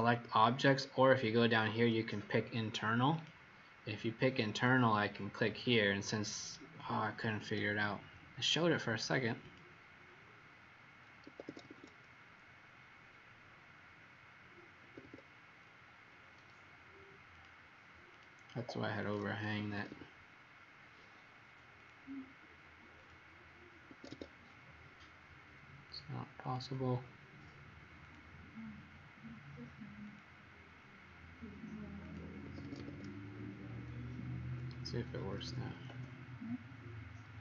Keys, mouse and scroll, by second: 3.0 click, 11.2 Escape, 11.4 Escape, 11.6 Escape, 11.7 Escape, 14.8 Escape, 15.0 Escape, 17.2 click, 19.5 Escape, 19.7 Escape, 21.7 click, 23.8 Escape, 24.0 Escape, 24.5-25.8 scroll up 2, 25.8 click, 26.4 click, 30.0 click, 32.4 Escape, 32.6 Escape, 33.1-34.0 scroll, 33.5 typing, 35.1-35.8 typing.